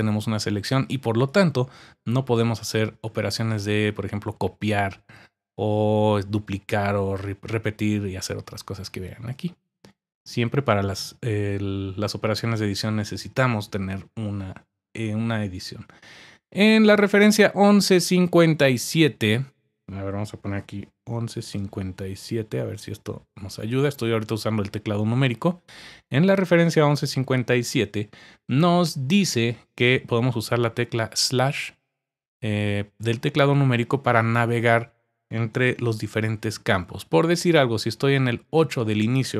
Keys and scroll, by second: 21.0-22.8 typing.